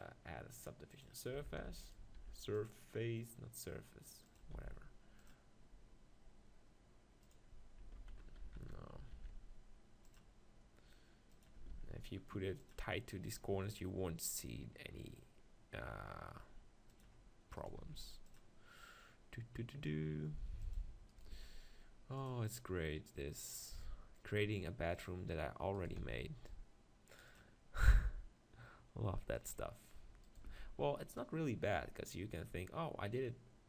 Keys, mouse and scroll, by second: 0.3-1.7 drag, 1.4 Tab, 1.8-3.6 right drag, 2.2 ctrl+r, 4.4-6.2 drag, 4.5 ctrl+r, 7.3-9.2 right drag, 8.4 ctrl+z, 9.2 ctrl+r, 11.4 right click, 11.6-13.2 drag, 11.8 ctrl+r, 17.0-18.9 drag, 17.6-19.5 right drag, 17.9 ctrl+r, 20.7-22.7 drag, 21.2-22.5 right drag, 21.4 ctrl+r, 22.7 right click, 25.1 middle click, 25.7-27.0 drag, 25.7-26.8 right drag, 26.0 ctrl+r, 27.0 middle click, 29.4-31.4 drag, 30.2-31.3 right drag, 30.5 ctrl+r, 31.4 right click.